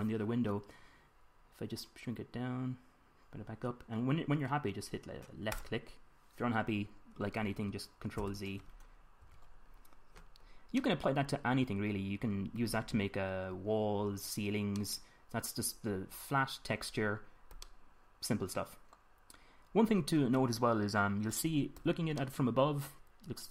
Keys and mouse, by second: 6.1-7.8 drag, 8.7 ctrl+z, 9.8 Tab, 22.8 middle drag, 23.2 middle click, 23.4 middle click.